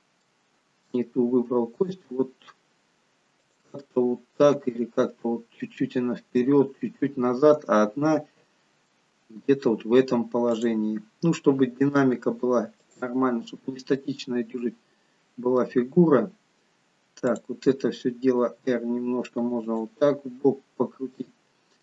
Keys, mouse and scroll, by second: 0.3 middle click, 1.6 g, 3.9 middle click, 4.7 g, 7.8 middle click, 9.8-10.5 scroll up 2, 10.5 click, 10.5-10.9 scroll up 1, 11.9 r, 13.5-14.3 scroll down 3, 14.1 middle click, 17.4 click, 18.5 r, 21.2 middle click.